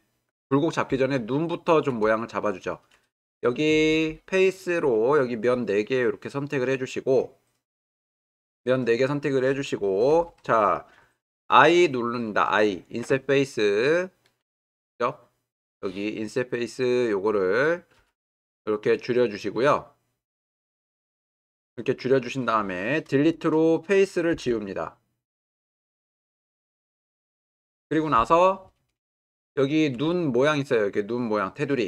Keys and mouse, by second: 1.1-1.8 ctrl+middle drag, 2.2-2.6 shift+middle drag, 3.7 3, 5.8-6.4 drag, 14.4-17.1 right drag, 18.0 i, 24.3 Delete, 29.3 ctrl+middle click.